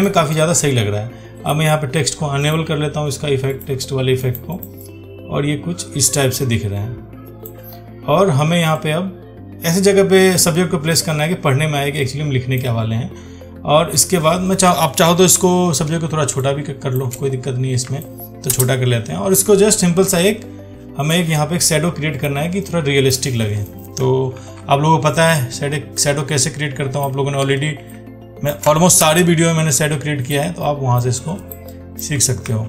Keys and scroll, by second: 15.6 ctrl+t, 24.6 ctrl+t.